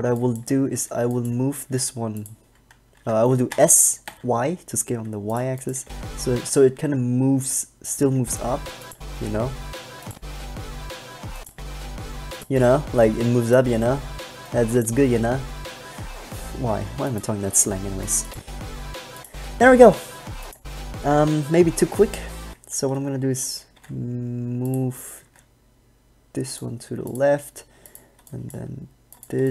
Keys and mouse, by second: 0.3 b, 1.0 b, 1.8 g, 3.3 middle click, 3.7 s, 5.6 click, 6.0 alt+a, 6.6 alt+a, 8.5 alt+a, 14.1 middle click, 17.1 s, 17.7 s, 18.5-21.1 drag, 22.6 alt+a, 23.9 g, 25.4 g, 26.8 click, 28.5 b.